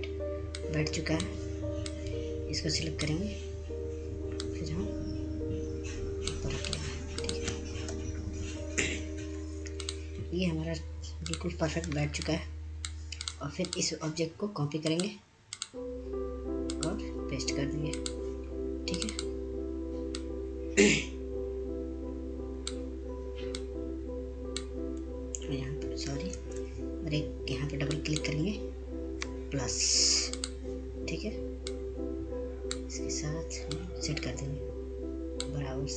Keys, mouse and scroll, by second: 2.7 F2, 3.7-9.3 drag, 10.5 Right, 11.9 Down, 12.5 click, 13.5 scroll down 1, 14.0 click, 14.5 F2, 15.0-29.4 drag, 29.4 ctrl+z, 31.0-33.3 drag, 33.5-35.9 drag.